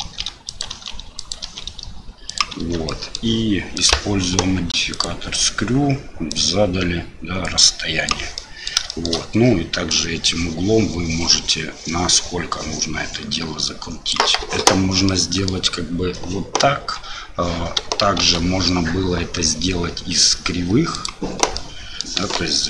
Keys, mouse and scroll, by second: 0.0 shift+d, 0.7 shift+d, 2.6 Tab, 2.9-3.2 middle drag, 3.8-5.0 drag, 6.3-8.1 drag, 8.3-8.7 middle drag, 8.9 shift+middle click, 9.9-14.1 drag, 15.0 click, 16.8 Delete, 18.2 shift+a, 21.5-22.0 middle drag, 22.2 KP_7.